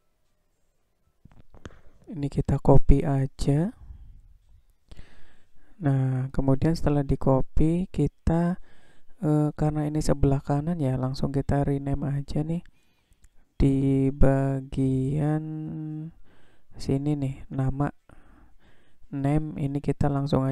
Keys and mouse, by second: 3.9 shift+d, 19.0-20.5 drag.